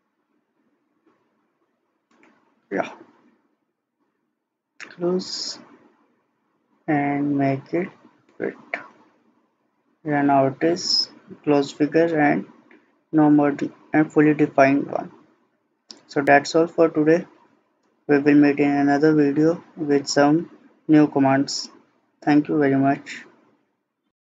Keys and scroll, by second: 0.1 Escape.